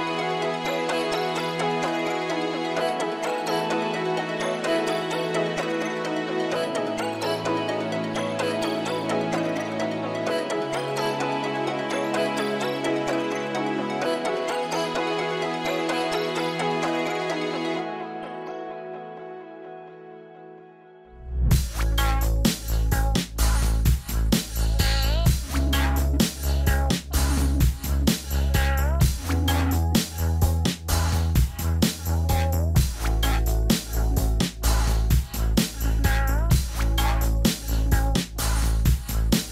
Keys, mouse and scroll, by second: 0.5 scroll up 1, 1.4 scroll up 1, 3.1 middle click, 4.6 scroll up 1, 4.8 scroll down 1, 4.9 middle click, 5.5 scroll down 1, 5.6 middle click, 7.0-7.7 scroll up 1, 7.7-9.2 scroll up 1, 9.2 scroll down 1, 9.3 middle click, 10.0 scroll up 1, 16.4 scroll up 1, 17.9 right click, 19.5 scroll down 1, 19.8 middle click, 24.8 scroll up 1, 25.6 scroll down 1, 25.9 scroll up 1, 26.0-26.3 scroll down 1, 30.0 scroll up 1, 33.5 scroll up 1, 33.6 middle click.